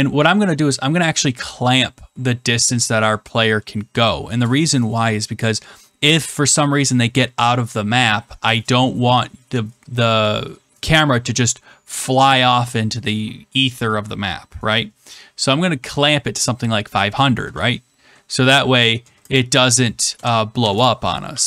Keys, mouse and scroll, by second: 18.9 typing, 20.1-21.4 typing.